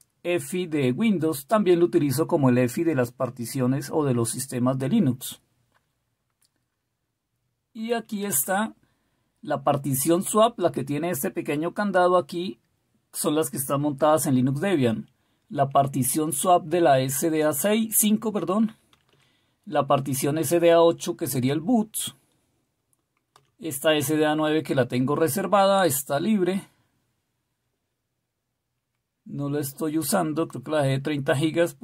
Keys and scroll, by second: 7.8 Down, 8.1 Down, 8.4 Down, 18.7 Down, 19.0 Down, 19.1 Down, 23.3 Down.